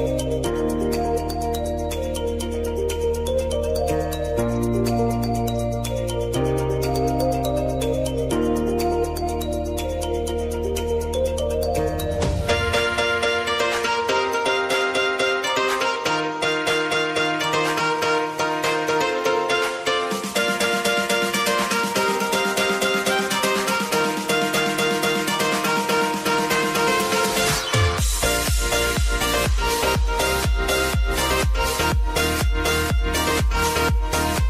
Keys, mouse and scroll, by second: 1.0-8.6 drag, 8.6 space, 9.9-10.9 typing, 12.1 click, 12.8 Return, 13.3 click, 13.7 space, 14.9 click, 15.9 F9, 16.6-19.6 drag, 19.9 space, 21.3 click, 22.6 space, 24.7 click, 25.3 ctrl+d, 26.2 click, 27.5 right click, 28.6-34.4 drag.